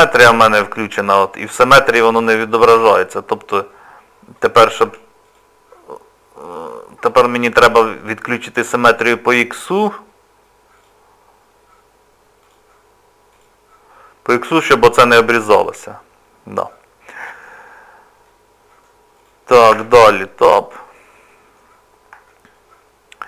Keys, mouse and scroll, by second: 4.3 click, 4.9 Tab, 5.2 click, 7.1 click, 10.8 click, 12.5 click, 16.7 middle click, 18.3 middle click, 19.1 click, 19.7 Tab, 20.3 middle click, 22.3 shift+middle click.